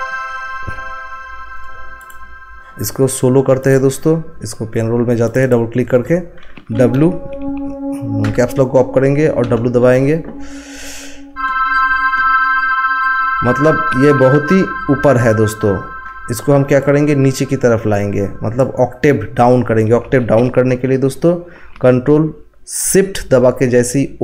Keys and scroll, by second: 6.6 w, 8.2 Caps_Lock, 9.4 w.